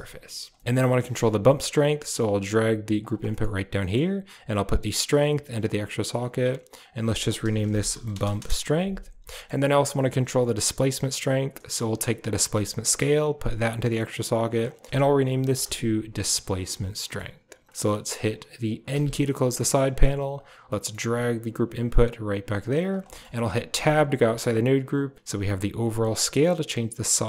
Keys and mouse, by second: 0.4 middle click, 0.8 middle click, 1.1 click, 1.3 middle click, 1.7 g, 3.2 middle click, 3.7 middle click, 4.8 click, 4.8 typing, 6.0 click, 6.1-8.4 drag, 9.1 middle click, 9.8 drag, 12.7-13.5 drag, 14.4 click, 14.5 click, 16.9 middle click, 17.7 drag, 18.8 n, 19.4 click, 20.3 right click, 20.6 click, 20.9 g, 22.9 click, 23.6 Tab, 24.8-27.2 drag.